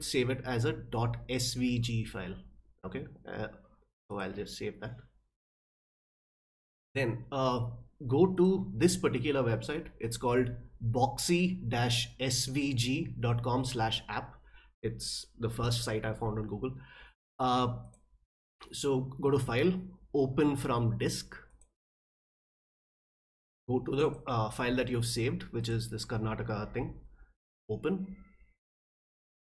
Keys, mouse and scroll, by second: 4.1 click, 8.3 click, 17.8 click, 21.5 click, 24.0 click, 25.6 click, 27.4 click.